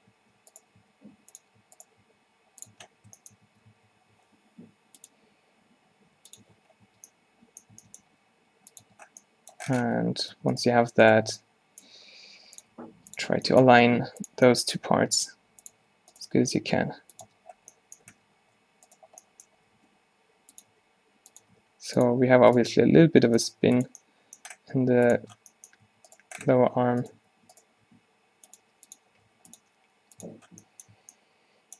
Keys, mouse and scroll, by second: 0.1 Tab, 0.9 s, 2.1 s, 2.8 Tab, 3.6 Tab, 3.8 a, 4.0 a, 6.5 Tab, 6.9 Tab, 7.9 Tab, 8.2 g, 8.9 Tab, 10.1 Tab, 10.5 Tab, 10.8 Tab, 12.0 r, 12.9 g, 13.3 Tab, 13.8 Tab, 14.0 r, 15.2 g, 16.3 alt+g, 16.9 g, 17.4 Tab, 18.2 Tab, 19.7 r, 20.8 r, 21.5 r, 22.6-24.1 drag, 22.8 r, 23.6 r, 24.1 middle click, 24.8 g, 25.3 Tab, 26.0 a, 26.7 Tab, 26.9 Tab, 27.2 Tab, 27.9 r, 28.6-29.6 drag, 28.7 g, 29.3 r, 29.7 g, 30.3 Tab, 31.0 a.